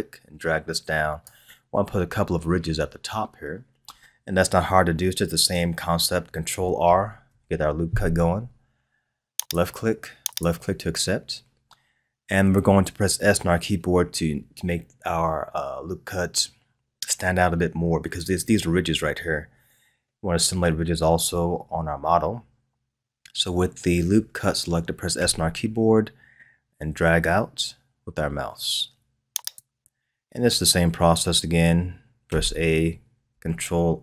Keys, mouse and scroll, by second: 7.2 ctrl+r, 25.2 s, 32.2 a.